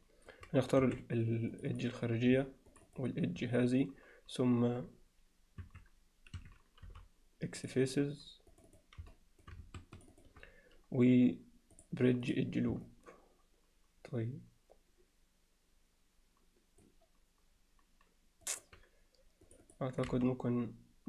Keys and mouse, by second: 0.8 2, 1.6 click, 2.8 shift+click, 5.6 Escape, 6.4 Escape, 6.9 x, 8.6 click, 9.1 middle click, 10.2 shift+click, 11.8-12.4 drag, 12.9-16.8 alt+middle drag, 18.5 alt+middle click, 19.5 click, 19.7 click, 20.1 x.